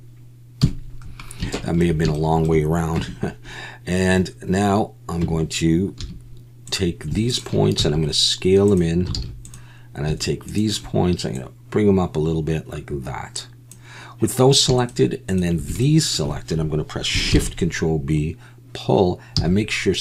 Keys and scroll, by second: 0.6 KP_1, 3.0 Tab, 5.2 Tab, 7.8 s, 9.2 alt+a, 17.3 ctrl+shift+b, 19.3 c.